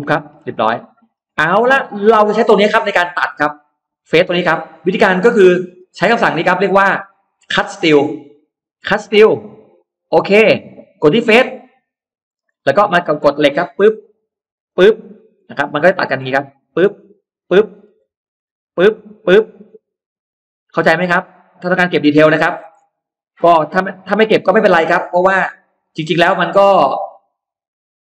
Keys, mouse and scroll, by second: 0.0 middle click, 0.1 scroll up 1, 0.4 click, 0.8-1.2 scroll down 1, 1.3 click, 1.6 scroll up 1, 1.9 middle click, 2.4-3.2 scroll up 2, 3.8 click, 4.3 click, 4.7-5.2 scroll down 1, 4.8 middle click, 5.2 middle click, 8.4 click, 9.7 click, 11.4 click, 12.1-13.0 scroll up 4, 12.4 middle click, 13.5 click, 14.5 click, 15.2 middle click, 15.6 scroll down 1, 16.4 click, 17.2 click, 17.6-18.0 scroll down 1, 18.0-18.3 scroll up 1, 18.4 click, 18.9 click, 19.2-19.5 scroll down 2, 19.7 scroll up 2, 20.4 click, 20.9 click, 21.6 click, 22.0 click, 22.3 middle click, 22.3-22.8 scroll down 2, 22.8 middle click, 23.2 middle click, 23.6 middle click, 24.0 click, 25.3 click, 26.4 click, 26.9 click, 27.8 click.